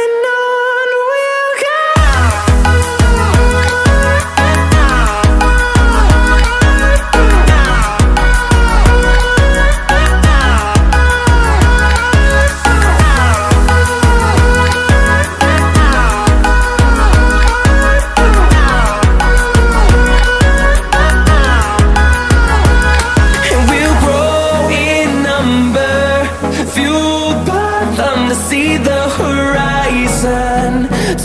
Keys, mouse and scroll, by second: 0.1 right click, 0.7 click, 3.0 click, 3.9 click, 4.3 click, 5.1 click, 6.2 middle drag, 7.1 click, 7.4 click, 8.6 click, 9.5 click, 10.9 middle click, 11.6 click, 12.5 click, 13.7 click, 19.1 click, 20.1 click, 20.9 click, 27.6 click, 28.5 click, 29.5 click.